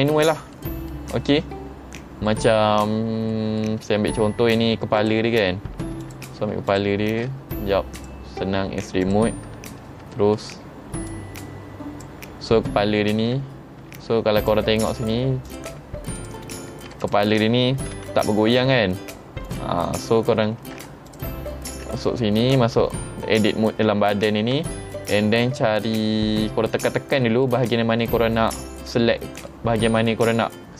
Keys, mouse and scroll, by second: 0.6 middle click, 2.3 middle click, 3.3 middle click, 5.0 click, 6.0 alt+click, 6.7 alt+shift+click, 8.0 click, 9.1 click, 9.7-10.1 scroll up 3, 10.2 shift+middle click, 11.1 click, 13.9 Tab, 14.4 click, 15.5 click, 16.2 click, 16.8 ctrl+Tab, 17.0 click, 18.0 r, 20.7 ctrl+Tab, 21.1 click, 21.8 Tab, 25.7 middle click, 25.7-27.2 scroll down 5, 26.1 middle click, 27.2 middle click, 28.5 middle click, 29.5 middle click.